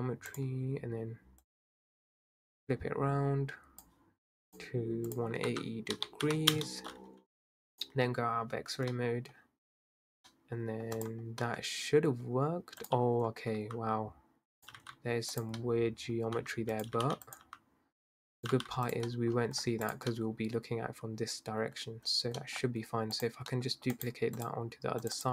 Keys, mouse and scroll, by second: 1.4 click, 4.5 click, 5.1-9.4 drag, 9.4-9.9 scroll down 2, 9.9-10.3 scroll up 4, 10.3-11.0 middle drag, 11.0 click, 11.5-12.8 middle drag, 12.8 click, 13.2-13.5 scroll up 2, 13.5 s, 14.7 g, 15.6-16.4 middle drag, 16.4 s, 16.9 g, 17.4 s, 18.5 g, 19.1 middle drag, 19.3-19.8 scroll down 7, 19.8 click, 20.1-21.7 middle drag, 21.7-22.0 scroll up 2, 22.4 middle click, 22.6-23.2 scroll down 5, 23.2 click, 23.5 middle drag, 23.7 scroll down 1, 24.1-25.3 right drag.